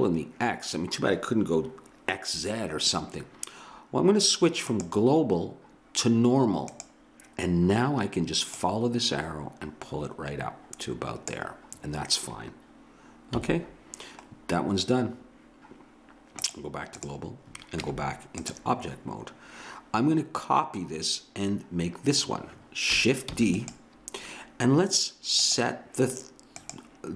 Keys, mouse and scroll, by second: 4.7-6.6 drag, 8.5-10.5 drag, 13.4 a, 16.4 click, 17.9 Tab, 23.3 shift+d.